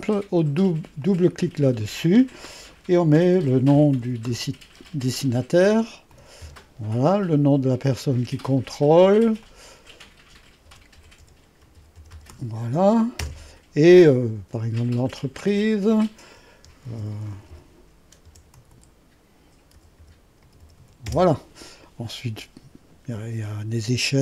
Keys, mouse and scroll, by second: 1.0 click, 3.1-4.8 typing, 6.1 typing, 6.4 Return, 9.2 click, 10.4-12.8 typing, 13.2 Return, 15.0 click, 16.6-21.2 typing.